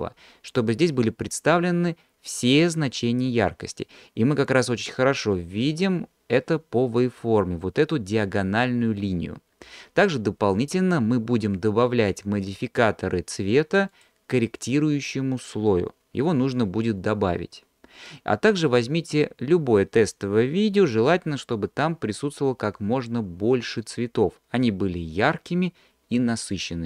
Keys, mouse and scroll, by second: 14.2 drag.